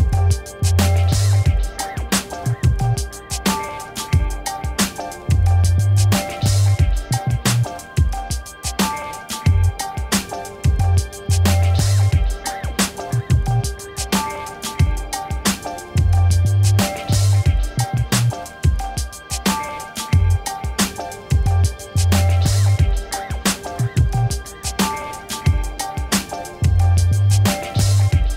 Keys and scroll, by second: 0.9 ctrl++, 6.7 Return, 8.6 v, 10.5 ctrl+d, 21.4 Left, 21.8 Up.